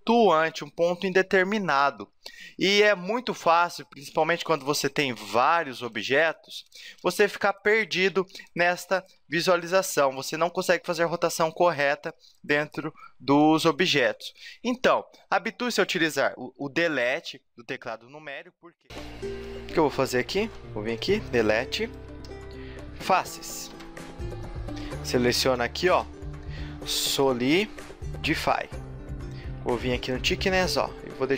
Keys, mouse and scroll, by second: 1.3 middle click, 3.5-3.9 scroll down 4, 4.1 shift+d, 5.0 right click, 5.3 right click, 5.6 shift+d, 6.4 right click, 6.8 shift+d, 7.4 right click, 7.8 right click, 8.1 shift+d, 8.9 right click, 9.1 shift+d, 9.7 middle click, 10.3 middle click, 11.4 a, 11.5 scroll up 4, 11.7 middle click, 12.3 right click, 12.6-13.3 scroll down 2, 13.3 middle click, 13.3 scroll down 1, 17.0 KP_Decimal, 17.9 scroll down 2, 18.4 middle click, 19.4 middle click, 20.4 ctrl+Tab, 21.8 right click, 22.2 Delete, 23.7 ctrl+Tab, 25.5 l, 25.9 space, 30.1 click.